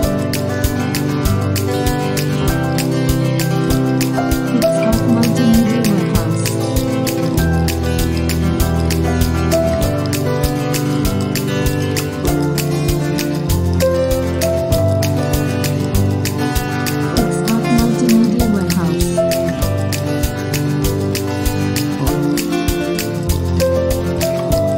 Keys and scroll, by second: 8.0 Escape, 8.6 super+p, 15.1 super+t, 19.3 alt+super+r, 19.8 super+u, 20.4 Escape, 20.9 super+j, 21.8 super+u, 22.8 super+u.